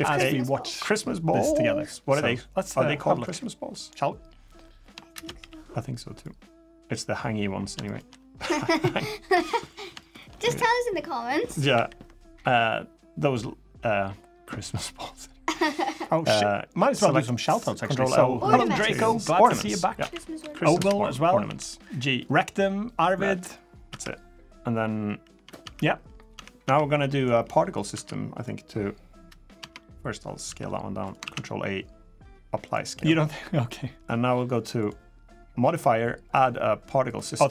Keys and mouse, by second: 4.9 shift+space, 6.0 click, 7.6 shift+click, 8.6 Tab, 9.1 Tab, 11.5 ctrl+l, 18.4 Tab, 19.2 a, 19.8 a, 20.2 s, 21.2 g, 23.2 click, 23.7 Tab, 24.2 click, 25.1 Tab, 25.4 Tab, 25.8 click, 26.1 Tab, 26.4 Tab, 27.7 Tab, 29.4 Tab, 30.2 s, 31.0 ctrl+a, 34.6 click, 35.1 click, 36.2-36.9 drag.